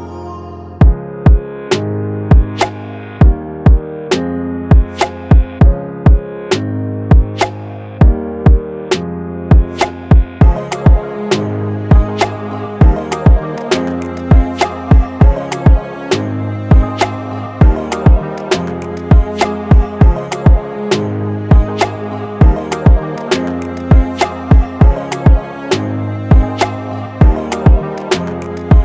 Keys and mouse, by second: 5.0 5, 6.1 Return, 9.0 click, 10.6-12.4 drag, 12.6 5, 13.4 Return, 14.1 click, 15.5 click, 18.7 shift+click, 20.7 shift+click, 25.8-28.8 drag.